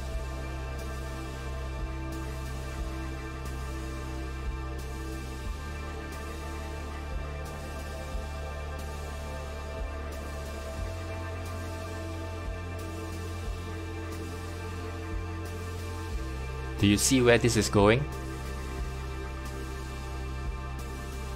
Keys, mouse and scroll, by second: 3.4 shift+middle click, 4.1-6.7 scroll up 1, 6.7 3, 8.5 click, 10.2 x, 10.7-13.4 middle drag, 13.4 click, 14.3 2, 14.5 click, 16.0 f, 16.9 click, 17.7 shift+click, 19.5 f, 19.9-21.3 middle drag.